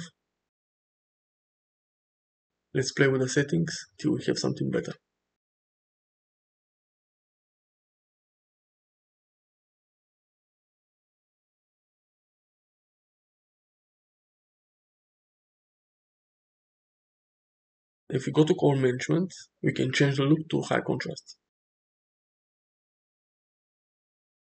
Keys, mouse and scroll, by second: 2.0 click, 3.2 click, 4.2 click, 6.0 click, 6.5 click, 8.5 click, 8.7 click, 9.3 click, 10.1 click, 10.9 click, 11.9 click, 17.4 click, 19.8 click, 21.2-22.5 drag, 23.1 shift+middle click, 24.2-24.4 drag.